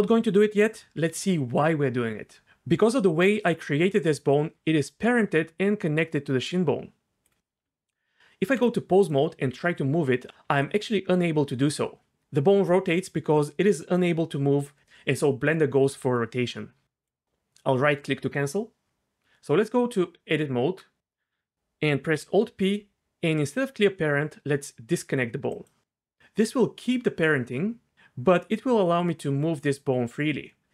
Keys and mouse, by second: 2.4 Tab, 2.4 g, 2.7 g, 4.7 g, 7.3 click, 7.6 Tab, 9.0 click, 9.5 g, 10.4 g, 19.2 Tab, 22.1 alt+p, 26.2 g, 26.4 g, 27.9 g.